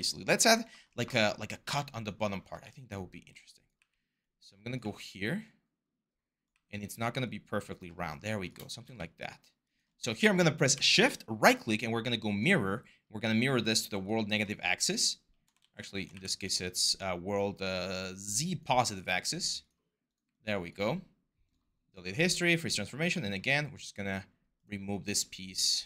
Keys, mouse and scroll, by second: 2.4 w, 2.9 r, 3.6 w, 4.6 e, 6.3 w, 15.4 ctrl+z, 15.9 w.